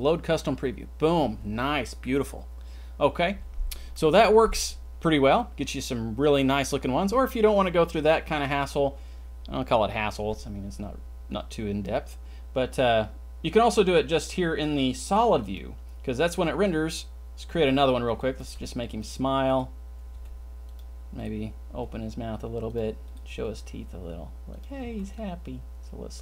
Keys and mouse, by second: 15.4 click, 18.5 g, 19.5 click, 20.2 g, 21.8 g, 23.4 g, 24.8 c.